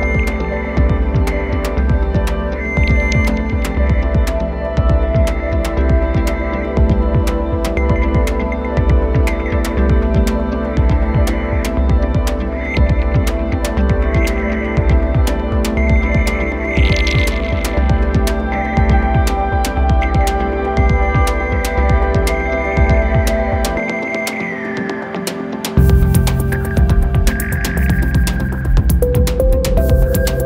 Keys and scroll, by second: 2.8 space.